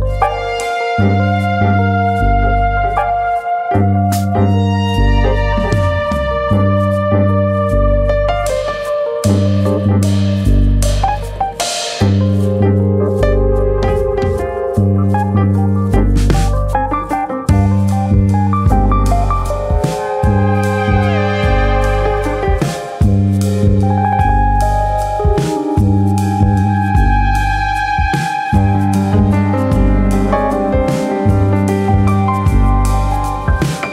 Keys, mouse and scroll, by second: 0.0 click, 0.7 click, 1.4 middle click, 1.8 Tab, 1.9-2.5 scroll up 1, 2.5 Tab, 2.5-3.1 scroll up 1, 3.1 Tab, 3.5 shift+click, 4.0 middle click, 4.5 ctrl+z, 4.9-5.2 scroll up 1, 5.8 f, 6.3 click, 7.1 click, 8.1 shift+click, 8.3 shift+click, 8.8 click, 10.0 click, 10.3 middle click, 11.1 middle click, 11.4 shift+middle click, 11.7 shift+middle click, 12.7 click, 13.8 middle click, 14.3 shift+middle click, 14.5 middle click, 16.4 middle click, 16.7 shift+middle click, 18.2 middle click, 18.2 click, 19.4 scroll down 2, 19.6 middle click, 20.7 click, 22.3 click, 23.1 middle click, 23.7 middle click, 24.6 middle click, 24.6 middle click, 25.3 middle click, 25.9 click, 26.4 middle click, 27.0 click, 27.6 scroll down 3, 28.1 ctrl+z, 28.8 middle click, 29.5 click, 29.9 middle click, 30.3 middle click, 30.6-31.3 scroll up 2, 30.8 middle click, 31.5 click, 32.2 middle click, 32.8 shift+middle click, 33.0 shift+middle click, 33.7 click.